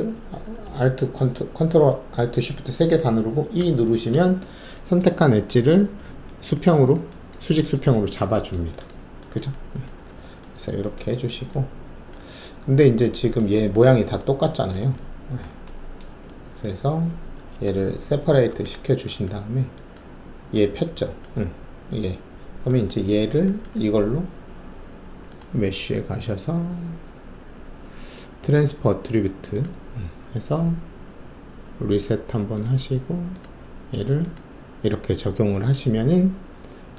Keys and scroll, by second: 3.6 ctrl+shift+a, 10.0 alt+`, 18.4 shift+y.